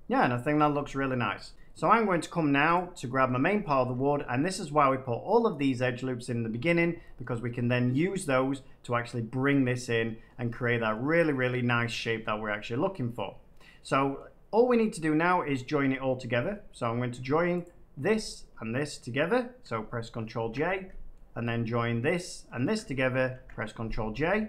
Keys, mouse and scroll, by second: 0.2 middle click, 1.0 middle click, 1.5 a, 2.2 middle click, 2.7 click, 3.2 middle click, 3.7 Tab, 4.1 middle click, 6.2 middle click, 7.1 shift+middle click, 11.1 middle click, 13.4 middle click, 14.1 middle click, 16.1 Tab, 16.7 middle click, 17.6 shift+click, 19.6 shift+click, 20.3 ctrl+j, 21.1 middle click, 21.3 middle click, 21.4 middle click, 21.5 middle click, 22.1 shift+click, 23.3 ctrl+j.